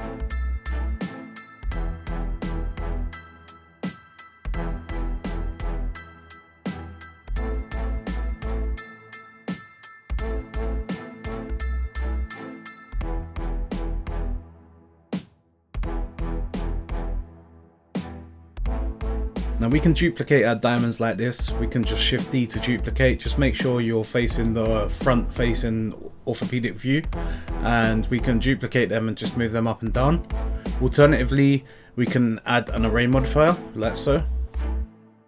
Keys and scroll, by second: 2.1-3.5 typing, 3.5 Return, 8.3 z, 10.8 z, 14.7 z, 19.3 z, 32.1 0, 32.2 Return, 34.5 0, 34.7 Return.